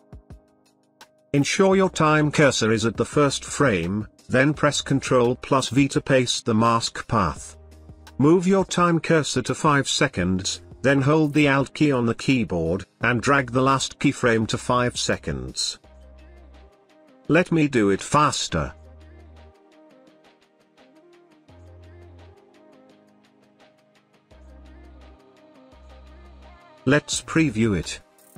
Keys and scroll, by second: 3.5 ctrl+v.